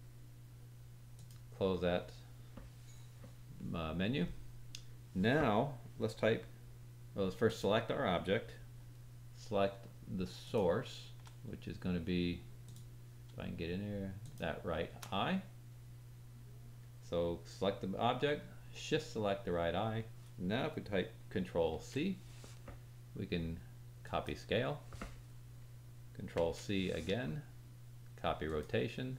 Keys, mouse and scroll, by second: 10.4 shift+click, 12.6 click, 14.2 shift+click, 21.7 ctrl+c, 25.5 ctrl+click, 26.3 ctrl+c.